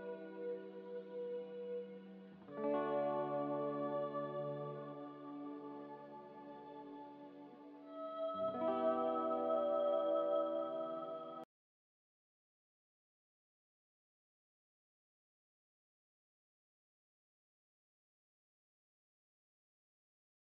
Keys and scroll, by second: 1.0 a, 4.6 z, 6.0 2, 6.2 Return, 7.5 Return, 8.9 Return, 9.9 Return, 11.4-14.2 typing, 17.0-17.7 typing.